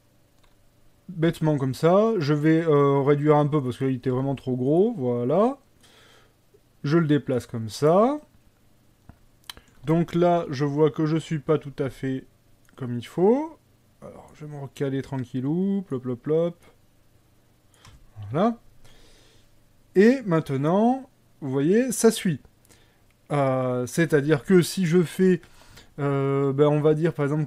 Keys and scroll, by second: 1.3 s, 3.5 s, 4.2 s, 10.6 KP_1, 11.2 KP_3, 18.4 KP_1.